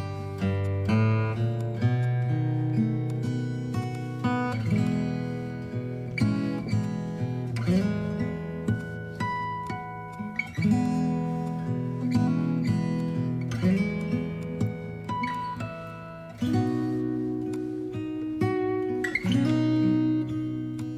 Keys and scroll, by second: 0.1 BackSpace, 1.8 b, 6.8 x, 8.5 v, 9.2 ctrl+v, 12.2 Up, 14.4 space, 17.4 space.